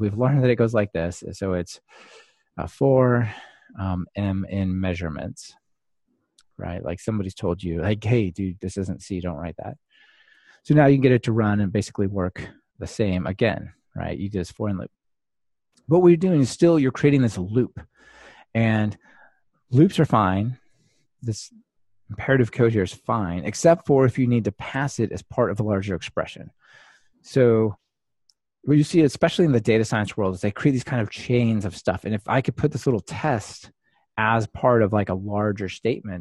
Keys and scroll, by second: 5.6 Return, 7.4 Delete, 9.7 super+x, 10.5 ctrl+r.